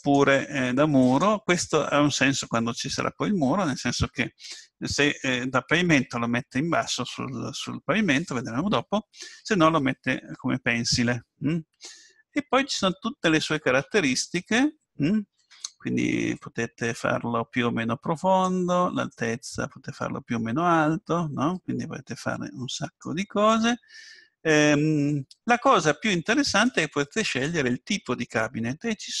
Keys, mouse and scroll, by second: 0.0-2.9 drag, 16.3-18.2 drag, 19.2-21.0 drag, 26.6-28.5 drag, 29.0-29.2 drag.